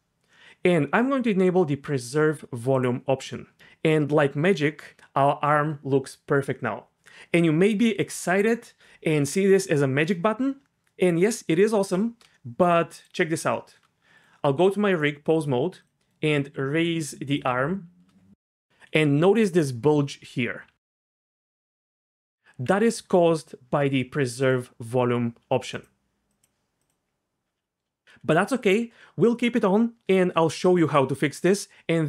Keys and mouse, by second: 2.8 click, 12.5-13.7 shift+middle drag, 13.8 Tab, 14.5 Tab, 15.8 click, 15.9-17.3 middle drag, 16.4 r, 18.9-20.9 d, 19.1 click, 22.2 Tab, 22.9 click, 25.7 click, 26.3 click, 26.8 click.